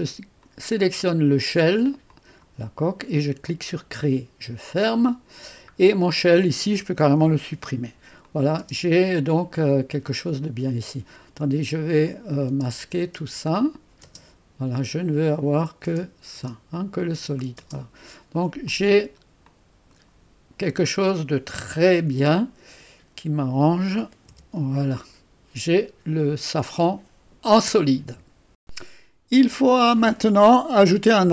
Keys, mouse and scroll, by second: 0.5 click, 2.1 click, 3.5 click, 4.8 click, 6.1 click, 7.2 Delete, 8.3 click, 8.6 space, 12.1-13.4 drag, 12.5-14.1 typing, 13.6 click, 15.3 click, 15.9 space, 16.4 space, 16.7 click, 18.1-18.7 scroll down 1, 18.7 click, 19.5 click, 24.3 3, 25.5-28.0 drag, 28.6 click.